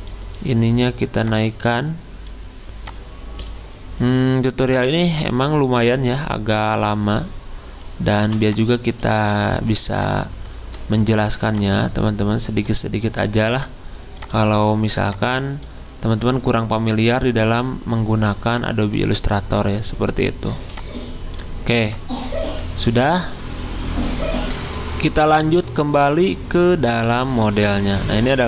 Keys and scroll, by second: 8.2 v, 26.1 alt+Tab.